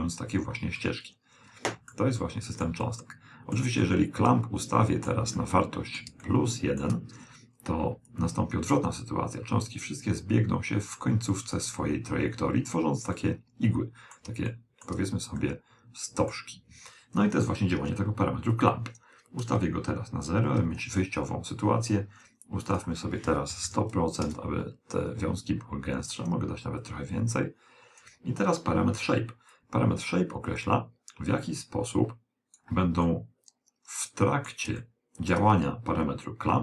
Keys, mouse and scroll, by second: 0.8-8.0 middle drag, 8.2 click, 12.6-17.2 middle drag, 18.6 click, 22.8 click, 23.8 0, 26.9 click, 29.6 click, 33.1-36.5 middle drag.